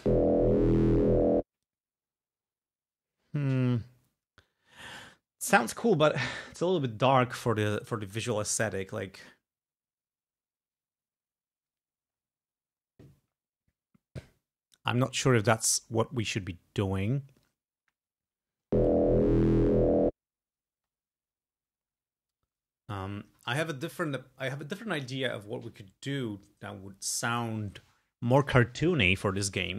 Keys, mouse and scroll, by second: 1.6 space, 18.6 space, 20.8 space.